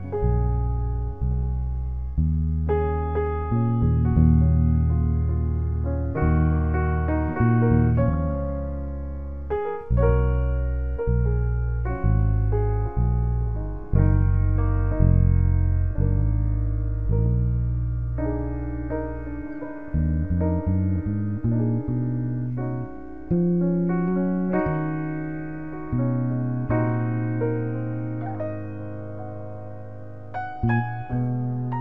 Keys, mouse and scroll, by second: 0.0-1.3 drag, 1.7 g, 2.0 shift+a, 3.5 x, 4.6 shift+a, 5.0 shift+a, 6.3 g, 6.5 shift+a, 8.8 ctrl+z, 9.2 shift+a, 25.1-26.5 drag, 29.1 ctrl+v, 29.4 ctrl+b.